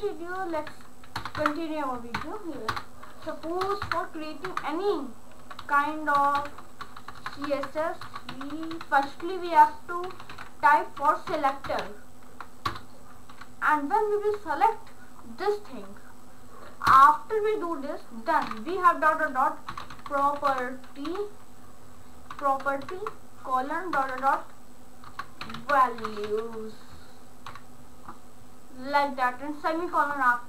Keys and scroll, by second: 0.6 Up, 1.2 Return, 2.2 ctrl+/, 2.7 Return, 3.7 Return, 3.8 Up, 4.5 Tab, 5.2-7.0 typing, 8.1-12.3 typing, 12.7 Return, 13.4 shift+], 16.9 Return, 18.5-21.1 typing, 22.3 y, 22.8 shift+;, 24.0-27.5 typing.